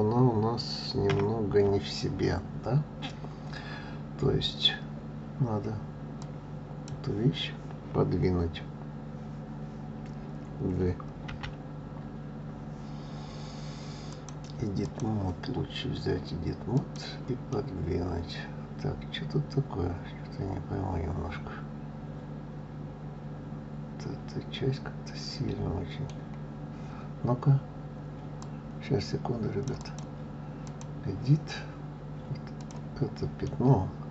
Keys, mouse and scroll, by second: 1.0 KP_1, 6.2 click, 14.1-16.9 drag, 17.5-20.5 middle drag, 28.4-32.7 drag, 33.4-34.1 middle drag.